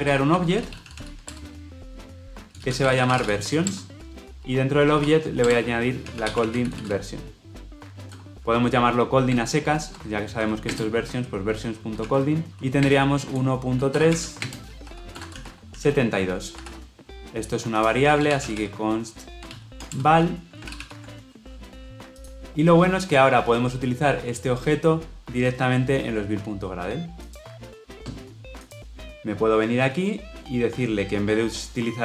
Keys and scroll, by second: 19.8 Return, 20.5 ctrl+alt+l, 20.7 ctrl+alt+o.